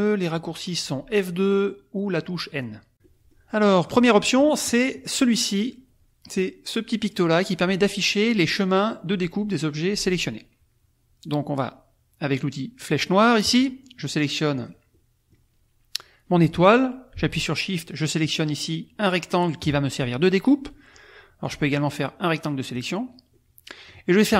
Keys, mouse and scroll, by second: 2.9-4.6 drag, 4.7 click, 13.4 click, 14.5 click, 14.9 click, 14.9 middle click, 17.9 shift+click, 21.4-22.9 drag, 23.4 click, 24.3 right click.